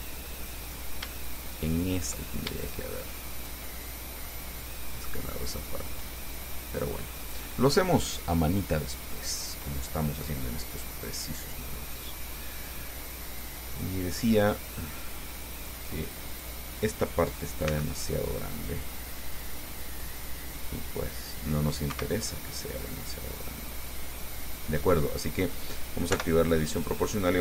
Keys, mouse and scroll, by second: 0.8 right click, 1.5 shift+right click, 2.8 shift+right click, 3.6 shift+right click, 4.0 shift+middle click, 5.3-7.7 drag, 8.5 scroll down 2, 9.3-15.5 middle drag, 16.5 click, 17.9 c, 20.2-22.1 drag, 22.1 Escape, 22.4-25.7 drag, 26.4 o.